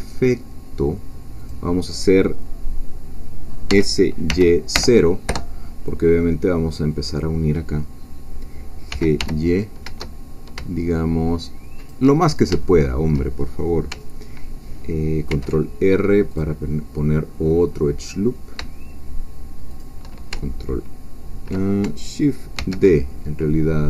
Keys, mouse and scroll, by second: 1.4-3.7 drag, 3.7 s, 4.3 y, 4.7 0, 5.3 Return, 6.6-8.9 scroll up 2, 8.9 g, 9.2 y, 11.8 shift+click, 12.2-12.6 shift+scroll down 2, 12.6 shift+middle click, 15.3 ctrl+r, 16.3 click, 19.7 shift+click, 22.6 shift+d.